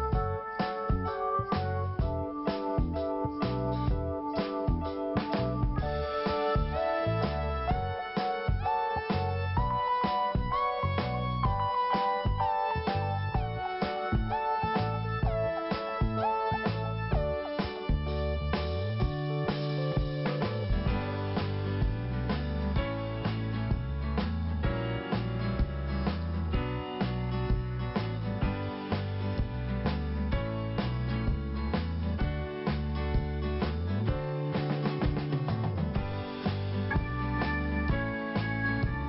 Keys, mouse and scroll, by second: 1.2 click, 2.5 click, 2.9 scroll down 1, 3.5-3.8 scroll up 2, 4.6 click, 5.7 click, 6.1 scroll down 1, 7.0 click, 8.9-9.5 scroll down 1, 9.5-9.8 scroll up 1, 12.2 click, 12.4 click, 14.0 click, 18.2 shift+i, 19.1 scroll up 2, 20.4 click, 22.1 scroll down 1, 23.0 click, 24.7 scroll up 1, 25.6 click, 29.9 scroll down 1, 31.2 click, 32.8 scroll up 2, 34.6 click, 36.1 click, 37.0 click, 37.7 click, 38.7 click, 38.7 click.